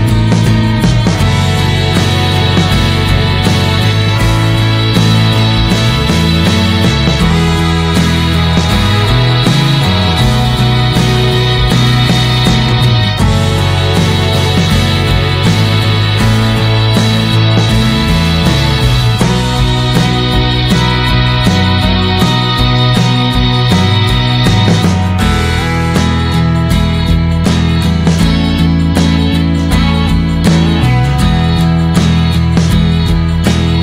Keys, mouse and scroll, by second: 3.2 alt+middle click, 3.8 alt+middle click, 4.1 scroll down 2, 4.3 shift+middle click, 4.7-5.5 scroll down 2, 5.5-6.7 drag, 7.0 alt+middle click, 7.6 scroll up 2, 7.8 s, 8.9 click, 10.1 click, 11.1 click, 15.4-18.0 drag, 18.0 middle click, 18.4 click, 19.7-24.6 drag, 24.6-25.7 middle drag, 25.7-26.0 scroll down 1, 26.0-28.3 middle drag, 28.3 click, 29.1-29.4 scroll down 2, 29.4 alt+middle click, 30.1 shift+middle click, 30.4-31.1 scroll up 1, 33.3 click, 33.7 scroll down 1.